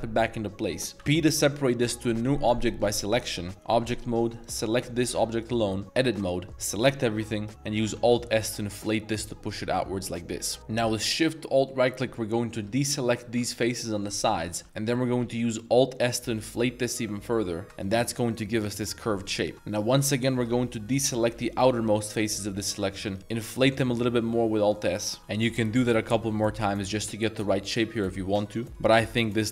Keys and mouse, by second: 0.9 p, 3.5 Tab, 4.9 g, 5.8 click, 5.9 Tab, 6.3 click, 6.8 a, 7.3 click, 7.4 middle click, 7.9 alt+s, 10.4 click, 10.6 ctrl+z, 11.9 alt+shift+click, 12.3 middle click, 13.1 alt+shift+click, 13.8 middle drag, 14.2 middle drag, 14.5 shift+middle drag, 15.3 alt+s, 17.9 Tab, 18.3-19.0 middle drag, 19.2 Tab, 19.2-19.5 middle drag, 19.7 alt+shift+click, 20.0-20.3 middle drag, 20.9 alt+shift+click, 21.3 z, 22.1 middle click, 22.5 z, 22.5 middle drag, 23.0 middle click, 23.2 alt+s, 24.6 click, 24.8 middle click, 25.6 alt+shift+click, 26.1 alt+shift+s, 28.4 shift+click, 28.7 Tab, 28.7-29.5 middle drag.